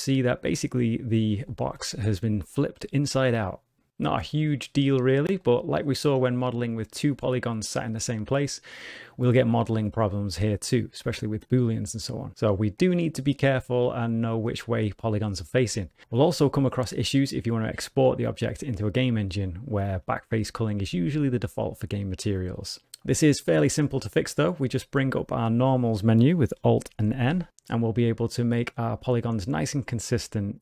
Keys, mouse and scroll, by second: 1.1 middle click, 1.1 scroll up 1, 1.4 shift+middle click, 5.3 middle click, 11.0 middle click, 21.9 shift+middle click, 22.5 middle click, 24.7 shift+middle click, 27.0 alt+n.